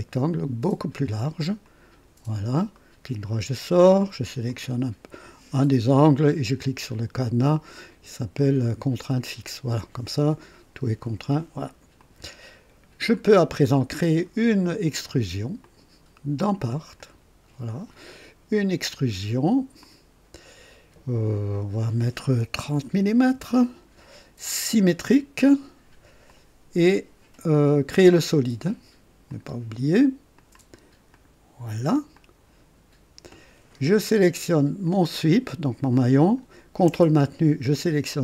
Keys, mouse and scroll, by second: 1.6 click, 2.8 right click, 4.5 click, 9.0 click, 12.0 click, 13.1-14.4 drag, 17.2 click, 19.8 click, 22.8 KP_3, 23.3 KP_0, 24.8 click, 26.3 click, 29.3 click, 30.4 click, 31.1 click, 32.2-33.9 drag, 34.8 click.